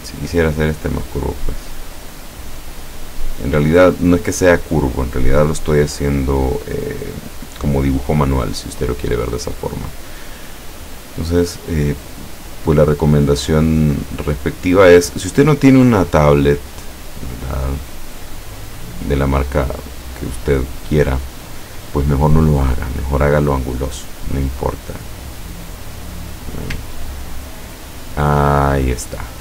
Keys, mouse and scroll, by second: 0.0 shift+click, 0.6-3.7 shift+drag, 11.5 shift+click, 13.5-15.3 shift+drag, 17.2 shift+click, 20.7 shift+click, 24.4 click, 25.3 click, 26.9-27.9 ctrl+scroll down 2, 28.5-29.1 ctrl+scroll up 2.